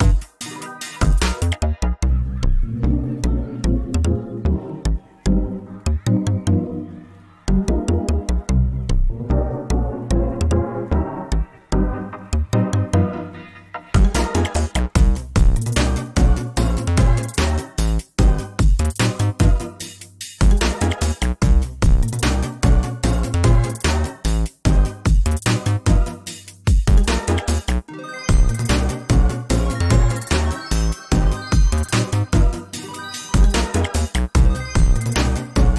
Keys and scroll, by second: 0.4 ctrl+v, 2.3 alt+Up, 3.0 alt+Down, 4.3 alt+Up, 6.1 alt+Down, 6.5 alt+Up, 7.4 alt+Down, 7.7 alt+Up, 8.0 alt+Down, 9.3 ctrl+z, 9.7 ctrl+space, 12.1 ctrl+space, 13.7 ctrl+alt+space, 14.3 ctrl+space, 18.5 ctrl+space, 23.4 ctrl+space, 27.6 ctrl+space, 31.1 ctrl+space.